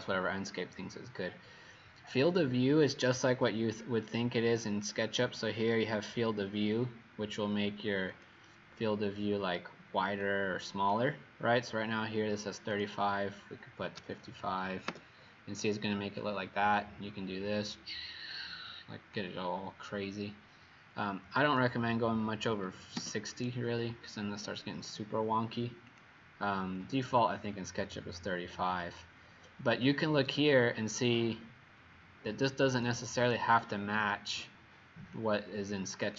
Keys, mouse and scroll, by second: 13.9 typing, 14.9 Return, 16.8 click, 22.5 typing, 22.9 Return, 25.8 click.